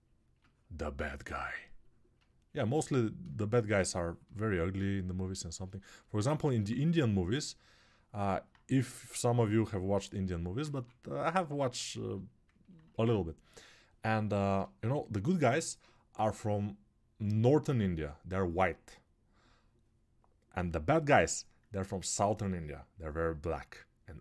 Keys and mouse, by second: 12.7-24.2 ctrl+alt+drag.